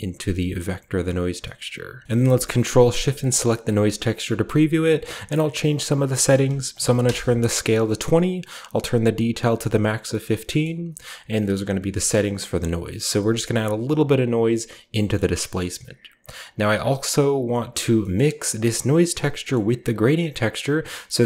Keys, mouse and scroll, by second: 0.9 click, 1.5-5.6 scroll up 1, 2.0 ctrl+x, 2.1-3.2 ctrl+shift+middle drag, 3.4-4.8 middle drag, 4.9-6.6 middle drag, 5.6-6.6 scroll up 1, 6.6 typing, 6.9 Return, 8.7 click, 10.1 middle click, 10.5-11.1 middle drag, 11.0 click, 11.5-12.3 scroll down 1, 12.3-13.4 scroll down 1, 12.5 middle click, 13.4 click, 15.2-16.3 scroll down 1, 16.3 click, 17.8-19.3 scroll down 2, 18.1 middle click, 19.3-19.9 scroll down 1, 19.4-21.2 middle drag.